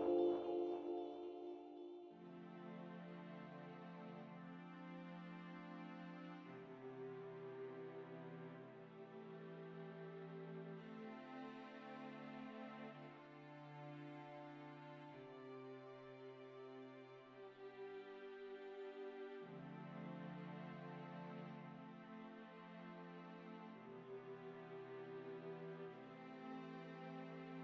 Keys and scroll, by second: 6.2 Tab, 11.0 KP_Divide, 12.7 shift+z, 17.6 e, 27.2 Delete.